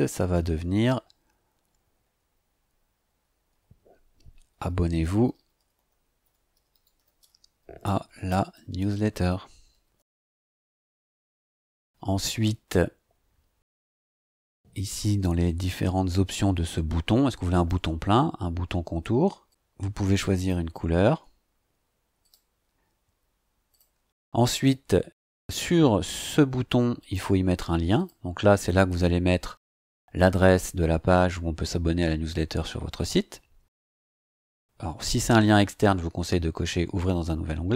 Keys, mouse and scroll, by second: 4.1-11.5 typing, 14.0 click, 17.5 click, 19.5 scroll down 2, 20.4 click, 22.2 click, 23.7 click, 27.0 click, 27.9 click.